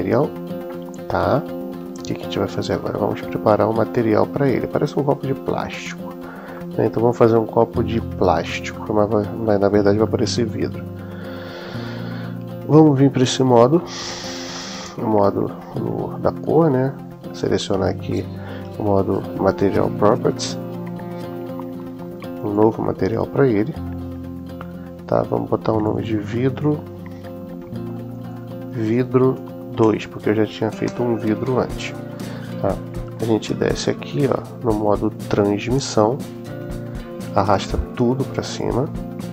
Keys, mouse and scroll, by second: 0.5-2.5 middle drag, 3.0-6.2 middle drag, 6.5-7.6 middle drag, 8.6 middle click, 13.2 click, 14.5-15.3 middle drag, 22.3 click, 25.6 click, 25.8-31.9 drag, 36.4-38.6 drag.